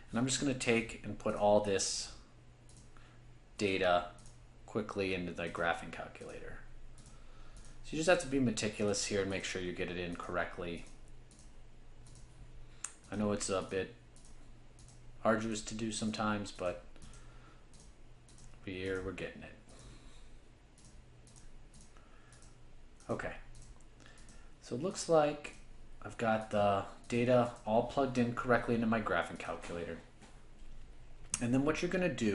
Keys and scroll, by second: 0.7 5, 1.4 Return, 2.0 7, 2.8 Return, 3.6 8, 8.7-9.4 typing, 12.9-13.6 typing, 16.7 5, 20.6-21.3 typing, 24.0-24.8 typing, 29.5 1.